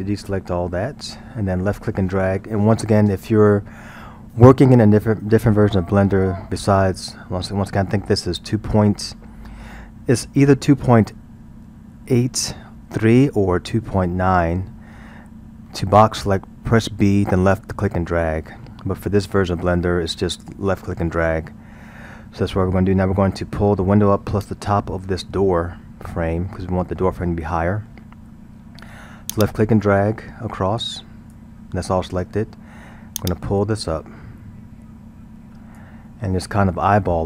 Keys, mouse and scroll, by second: 0.1 a, 29.3 click, 33.2-36.1 drag, 36.1-37.2 middle drag.